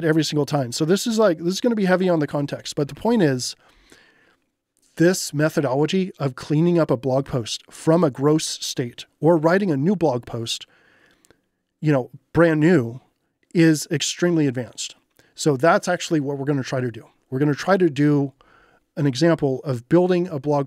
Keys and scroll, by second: 2.5-3.5 typing.